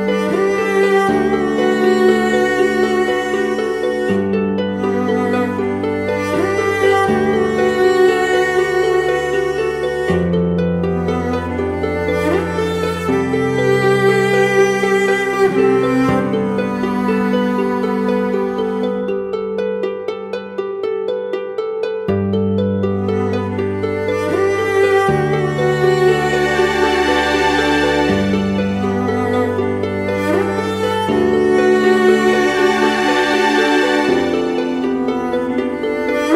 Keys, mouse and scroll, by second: 1.0 double click.